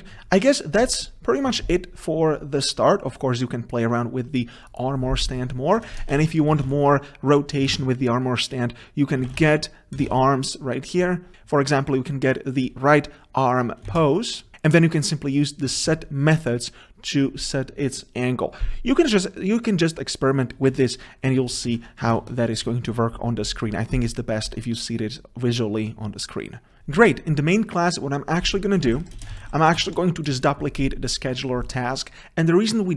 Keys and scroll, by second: 7.7 Return, 14.0 Return, 29.0 ctrl+c, 29.4 ctrl+v.